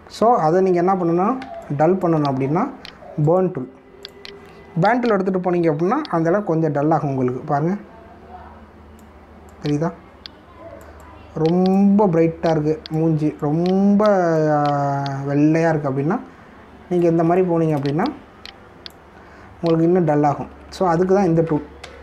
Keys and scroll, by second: 1.5 ctrl+=, 2.4 space, 18.2 space, 21.1 ctrl+alt+z.